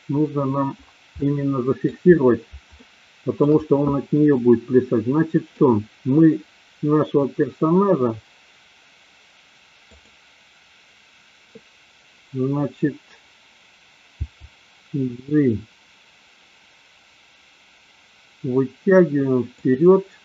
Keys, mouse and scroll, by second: 1.2 middle click, 2.8 shift+middle click, 4.3-5.6 middle drag, 9.8 click, 14.3 g, 19.7 click.